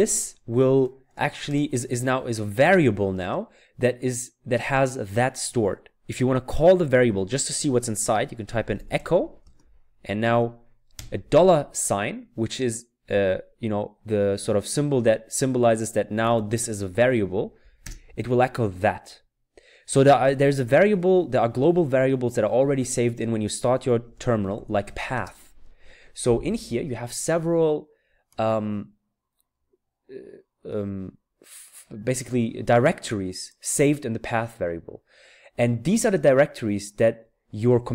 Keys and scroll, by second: 0.0-2.7 typing, 8.2-9.4 typing, 10.9 typing, 14.8 typing, 15.9-16.9 typing, 17.8 Return, 20.0-20.9 typing, 23.9-25.1 typing.